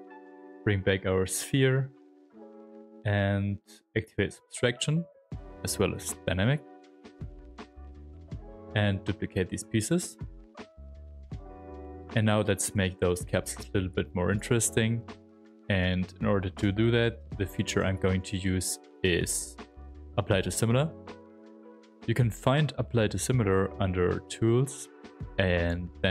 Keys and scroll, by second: 0.0 shift+f, 9.5 ctrl+shift+d, 16.6 m, 17.7 Tab.